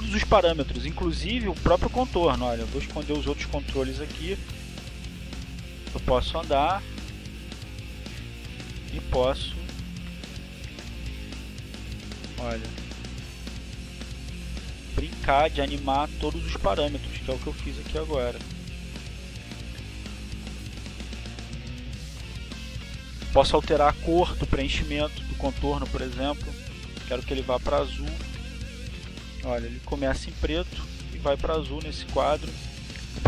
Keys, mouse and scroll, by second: 0.0-4.8 drag, 5.7 click, 6.0 click, 6.5 click, 6.8 click, 8.2 click, 8.8 click, 10.2 click, 11.0 click, 11.8-13.0 drag, 14.3-15.8 drag, 17.0-18.0 drag, 18.8-22.8 drag, 23.7 click, 25.7 click, 28.3 click, 29.3 click, 30.3 click, 31.5 click, 32.5-33.2 drag.